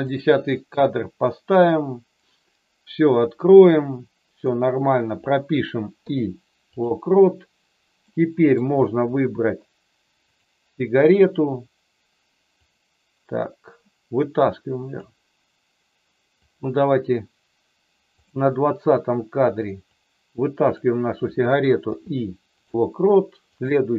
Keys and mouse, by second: 1.6-4.4 drag, 8.0 middle click, 12.5-14.9 drag, 16.4 click, 18.2 click, 19.8 click, 21.8 i, 23.7 click.